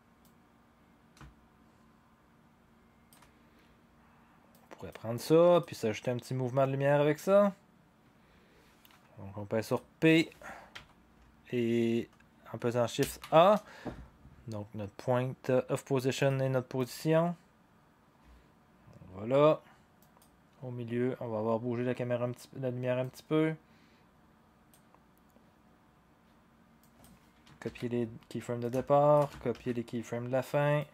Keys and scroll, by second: 10.7 p, 13.0 a, 27.6 ctrl+c, 29.5 ctrl+v.